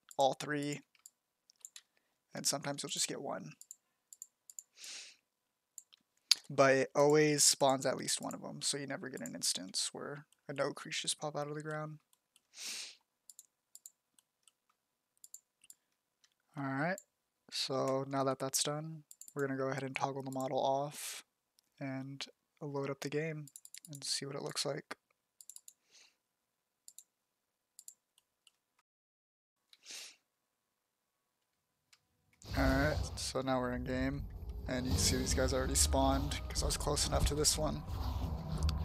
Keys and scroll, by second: 0.5 z, 5.9 f, 8.2 f, 9.2 f, 15.8 z, 17.1 f, 30.7-37.2 typing.